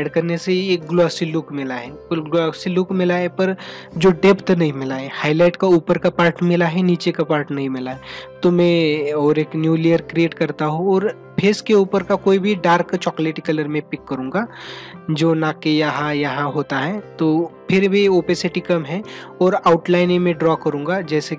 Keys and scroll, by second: 10.6 ctrl+-, 20.9 ctrl+alt+z.